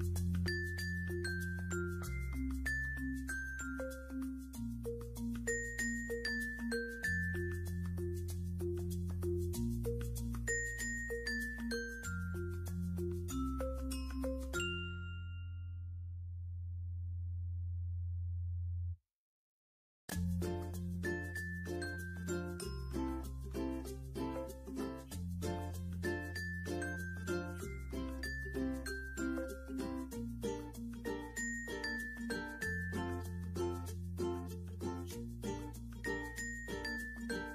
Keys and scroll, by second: 0.3 0, 3.4 ctrl+d, 3.7 ctrl+d, 4.2 ctrl+d, 4.8 ctrl+d.